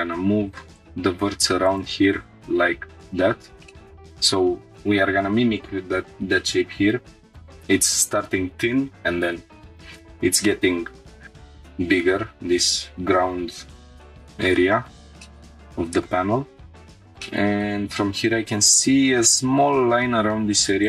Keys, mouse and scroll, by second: 0.8-1.9 drag, 2.0 g, 2.1 z, 3.0 click, 3.3 scroll down 2, 3.7 shift+middle click, 13.9 shift+middle click, 14.2 scroll up 1, 14.8 scroll up 1, 15.2 shift+middle click, 15.7 middle click, 16.9 click, 16.9 scroll down 1, 17.2 shift+middle click, 18.4 scroll up 1, 19.1 scroll up 1, 19.2 shift+middle click.